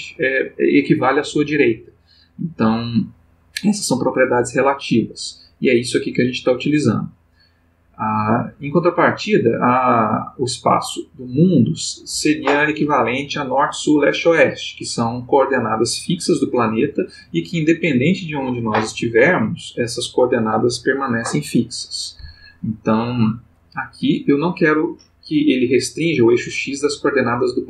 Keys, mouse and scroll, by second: 8.1 click, 10.7 click.